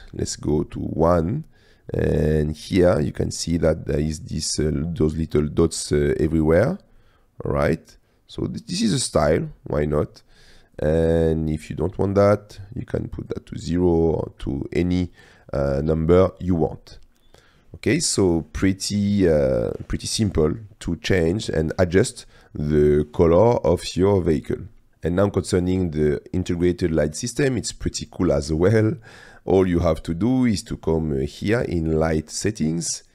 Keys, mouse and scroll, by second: 1.3 middle click, 1.3 scroll up 1, 1.4 middle click, 4.0-4.5 middle drag, 7.0 drag, 7.2-9.0 middle drag, 9.5 middle click, 10.9-12.0 drag, 13.4 click, 18.5-19.2 drag, 19.2-20.4 middle drag, 20.9 middle click, 21.8 shift+middle click, 22.8 click, 24.0 click, 24.9 click, 25.3-26.9 drag, 28.3-29.1 drag, 29.4 click.